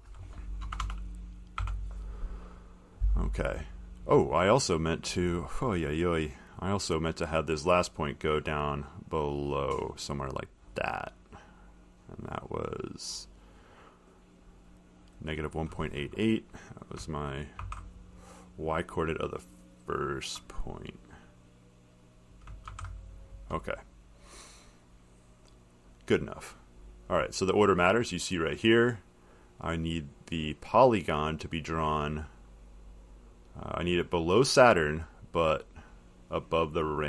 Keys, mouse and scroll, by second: 2.9 click, 5.5 middle click, 5.5 middle click, 6.7 click, 10.3 click, 13.3 click, 15.3 click, 15.7 middle click, 15.7 middle click, 16.4 middle click, 17.8 ctrl+c, 18.2 middle click, 18.3 middle click, 20.6 click, 21.1 click, 22.5 click, 22.9 ctrl+v, 25.8 click, 28.0 middle click, 29.5 middle click, 33.5 click, 35.3 click.